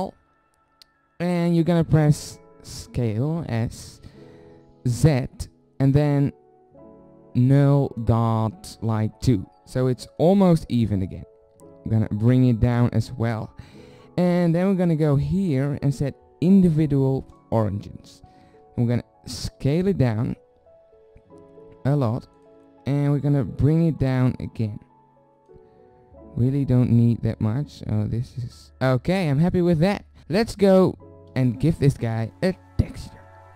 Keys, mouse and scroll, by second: 2.8 s, 12.0-17.8 middle drag, 18.6 click, 19.4 middle click, 19.4 s, 24.0-26.0 drag, 26.0 middle click, 27.7 click, 28.6 z, 29.2-30.2 middle drag, 31.3 KP_7.